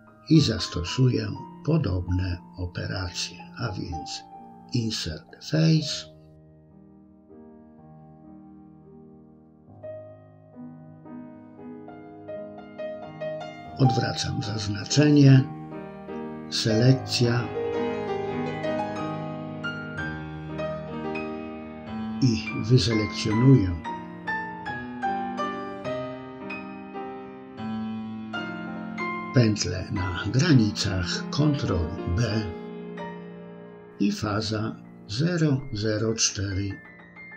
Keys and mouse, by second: 0.9 click, 1.2-2.8 drag, 3.0 middle click, 3.3 middle click, 5.3 click, 6.7 middle click, 7.1-8.5 drag, 7.5 BackSpace, 8.7 middle click, 9.5 middle click, 9.9 middle click, 13.1 click, 14.0 middle click, 14.9 middle click, 17.7 ctrl+b, 23.6-26.2 drag, 28.1 ctrl+b, 33.5-37.3 drag, 35.3 0.